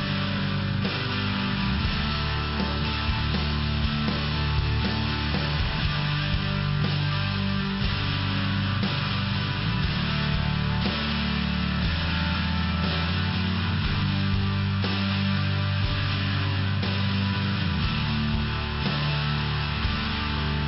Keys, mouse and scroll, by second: 1.2 click, 2.7 click, 6.5 click, 6.8 click, 8.3 click, 16.3 click, 17.1 click, 17.8 click, 18.8 click, 18.9 click, 19.1 click, 19.4 click.